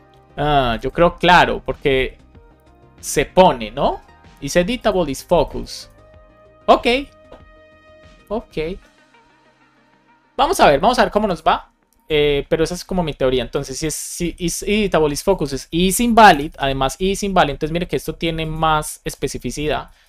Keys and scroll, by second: 14.4 super+x, 16.4 super+v, 16.8 Up, 17.2 Down, 19.0 BackSpace, 19.4 Up, 19.9 shift+Up.